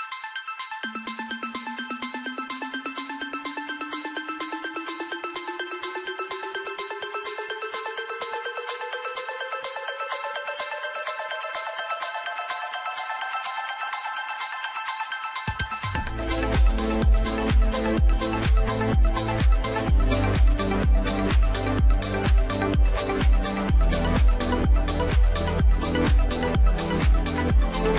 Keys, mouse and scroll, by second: 0.4-2.4 middle drag, 2.4 click, 3.0 scroll up 2, 3.6-6.6 middle drag, 6.6 scroll down 4, 7.6-10.8 middle drag, 14.4-15.3 scroll up 1, 15.7-18.7 middle drag, 19.1-19.7 scroll down 5, 19.7-22.7 middle drag, 23.3 click.